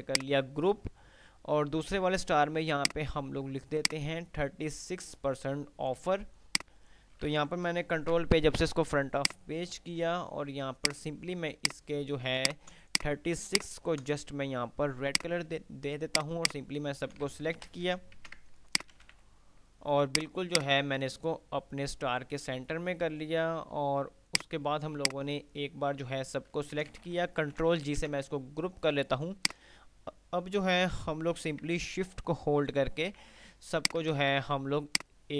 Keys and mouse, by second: 0.9 F3, 2.9-3.4 drag, 6.2 F2, 8.2 shift+Page_Up, 9.0 F2, 9.4 click, 9.7 F2, 10.9 click, 11.7 ctrl+click, 13.0 click, 13.7 ctrl+click, 15.4 click, 17.2 ctrl+g, 17.9 Delete, 18.4 ctrl+z, 18.9 shift+click, 19.0-20.0 typing, 20.2-22.2 drag, 22.2 ctrl+r, 22.7 F3, 24.7-26.0 drag, 27.0 ctrl+g, 27.5 Delete, 28.0 ctrl+z, 28.5 ctrl+shift+z, 29.5 shift+click, 32.5 ctrl+r, 34.0 shift+click, 34.5 c, 35.2 click.